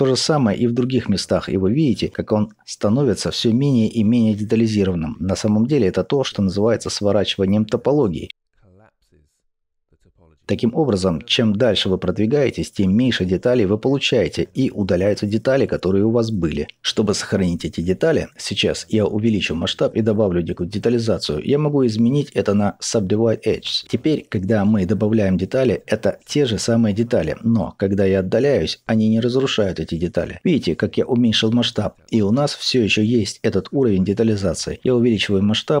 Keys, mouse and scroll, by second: 1.5 scroll down 1, 3.2-3.7 scroll down 1, 11.5-12.3 scroll down 2, 18.7 scroll up 2, 20.5 click, 21.6 click, 27.6 click, 28.6-29.2 scroll down 1, 29.2-35.8 drag, 31.1-31.7 scroll down 2.